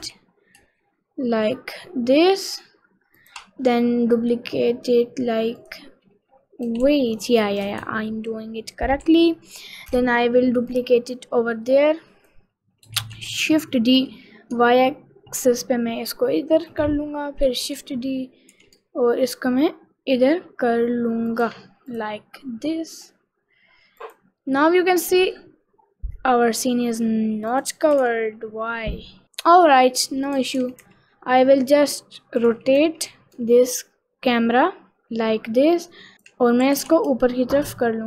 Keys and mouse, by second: 3.8 middle click, 5.7 click, 6.9 ctrl+z, 9.1 ctrl+shift+z, 9.9 middle click, 12.0 click, 13.2 shift+d, 17.8 shift+d, 22.0 click, 27.6 click, 28.1 r, 28.1 x, 30.5 r, 32.5 r, 35.5 ctrl+r, 36.8 g.